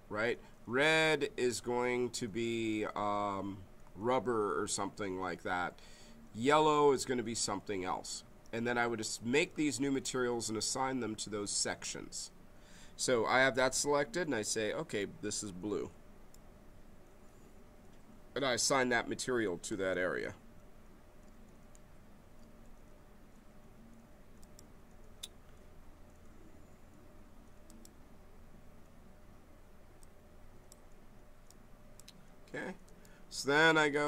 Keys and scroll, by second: 19.7 space.